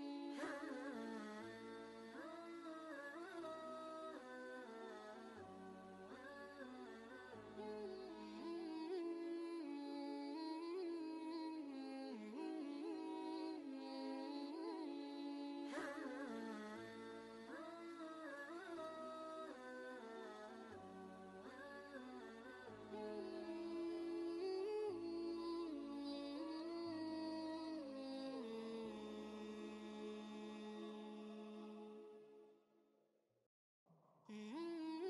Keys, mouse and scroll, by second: 0.7 ctrl+space, 0.8 ctrl+click, 1.8 click, 2.4 ctrl+space, 2.5 ctrl+click, 2.9-3.4 typing, 3.0 click, 3.6 ctrl+space, 3.7 ctrl+click, 4.9 right click, 5.0 click, 5.8-6.5 typing, 6.1 right click, 7.3 click, 8.0 ctrl+space, 8.1 ctrl+click, 8.5 ctrl+space, 11.3 click, 14.2 click, 14.2 g, 14.7 ctrl+space, 14.9-19.2 ctrl+drag, 19.4 ctrl+space, 19.7 ctrl+click, 20.0 ctrl+space, 21.0 click, 21.4 ctrl+space, 21.5 ctrl+click, 22.0 ctrl+space, 22.2 ctrl+space, 23.0 click, 26.2 right click, 27.0 click, 30.8 g, 31.9-33.6 shift+drag, 33.9 ctrl+space, 34.1 ctrl+click, 34.4 ctrl+space.